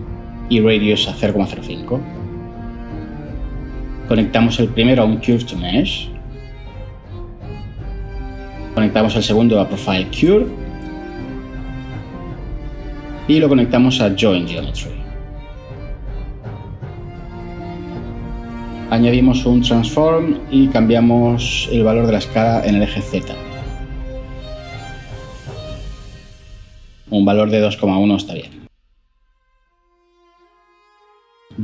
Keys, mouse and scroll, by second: 1.9-2.3 typing, 3.0 Return, 5.3-8.2 typing, 9.0 Return, 19.4 ctrl+shift+a, 19.7-20.4 typing, 20.8 Return, 28.0-28.5 typing.